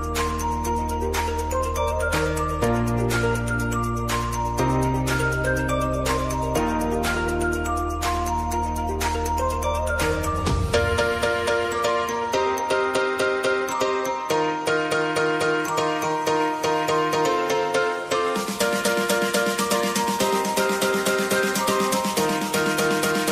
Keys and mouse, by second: 1.1-9.0 drag, 9.0 space, 10.7-13.1 drag, 13.1 space, 14.8 click, 15.2 space, 17.4 click, 17.8 ctrl+c, 18.3 click, 19.1 ctrl+v, 20.2 u, 21.5-23.3 drag.